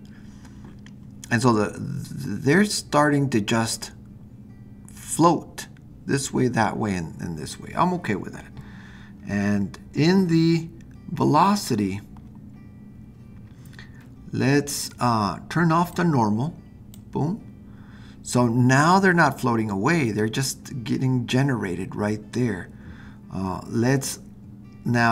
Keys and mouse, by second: 15.9 click.